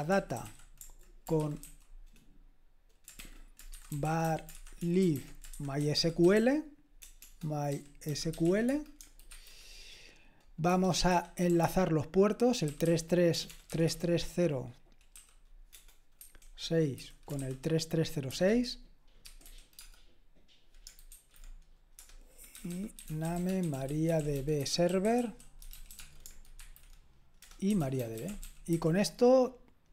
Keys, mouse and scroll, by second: 0.0-1.9 typing, 3.2-9.3 typing, 10.7 Return, 11.1-13.8 typing, 16.2-19.9 typing, 21.1-29.2 typing.